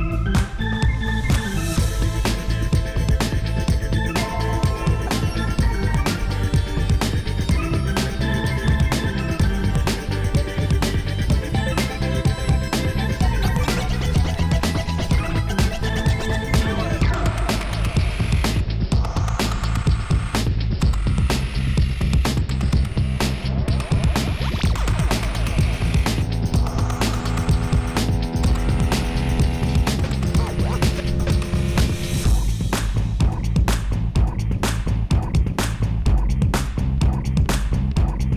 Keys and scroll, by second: 8.0 i, 28.5 i.